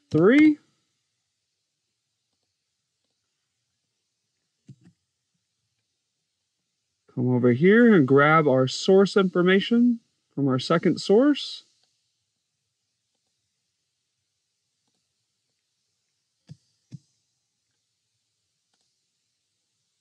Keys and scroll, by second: 0.0 -, 0.2 3, 4.5 BackSpace, 4.8 1, 16.3 7, 16.7 0.